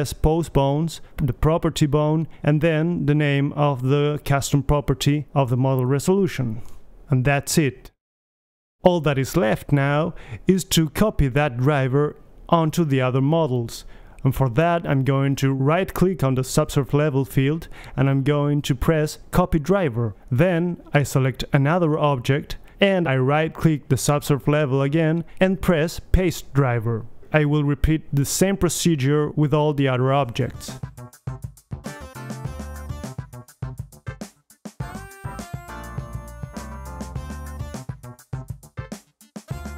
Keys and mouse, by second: 8.2-16.8 middle drag, 17.2-20.3 right drag, 21.0-22.7 right drag, 21.9 h, 22.7-23.5 middle drag, 23.5-26.2 drag, 26.2-29.3 right drag, 28.7 h, 29.4-29.8 drag, 30.2 right drag, 30.3 h, 30.5 Delete, 30.5 b, 31.6 click, 32.1 a, 34.3 right click, 35.2 h, 35.4 middle click, 35.5 right click, 36.3 click, 36.6 right click, 37.3 h, 37.5-39.1 right drag, 38.4 h, 39.4 click.